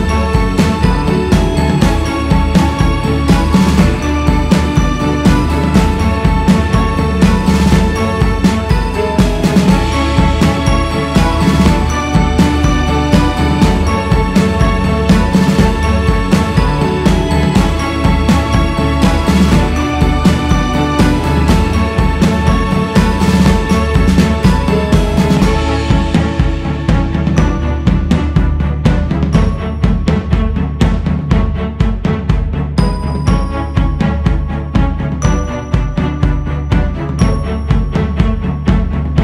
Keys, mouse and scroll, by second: 9.5-10.7 drag, 10.7-11.4 scroll down 4, 11.4 click, 11.9-12.8 scroll down 2, 12.8-16.9 drag, 16.9 scroll up 3, 17.7-39.2 drag.